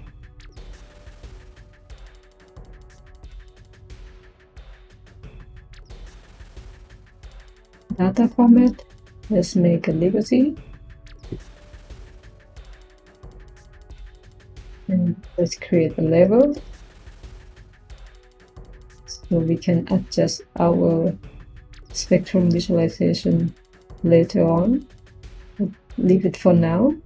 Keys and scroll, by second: 14.9 Tab, 15.3-16.8 typing.